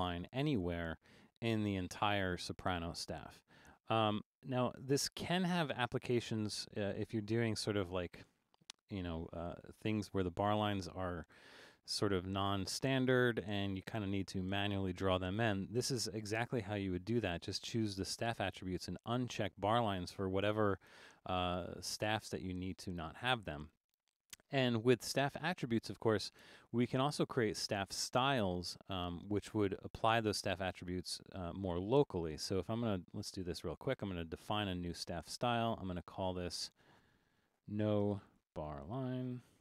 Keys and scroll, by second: 4.2 super+z, 5.7 super+z, 6.7 super+z, 37.3-39.6 typing.